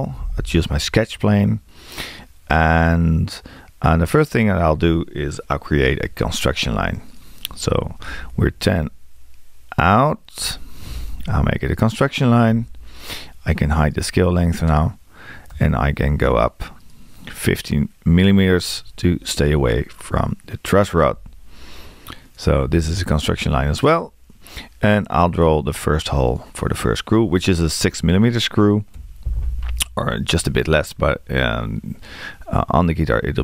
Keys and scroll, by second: 8.3-9.2 typing, 15.5 l, 18.7 1, 29.0 6.